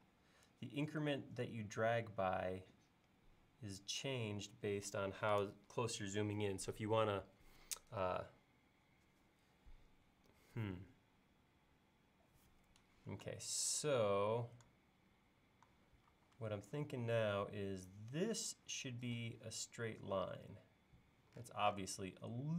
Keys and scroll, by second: 16.1 l.